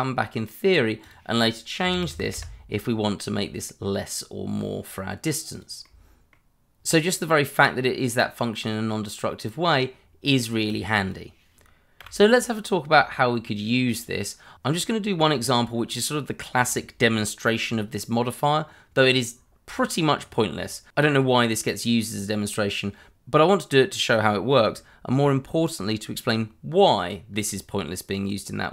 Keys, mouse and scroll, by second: 1.0 click, 1.8-2.6 typing, 5.5 click, 5.9 middle click, 10.6 click, 12.0 Delete, 13.1 middle click, 13.3 shift+middle click, 20.6 middle click.